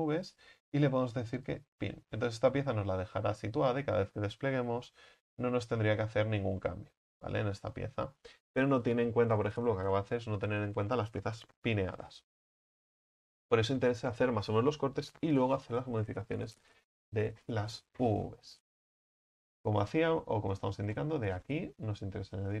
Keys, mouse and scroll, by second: 1.7-3.2 drag, 3.2 a, 3.4 a, 5.6 u, 12.7 ctrl+z, 19.6 right click, 20.1-20.6 scroll up 4, 20.6 right click, 21.0 middle click, 21.9-22.6 scroll up 3.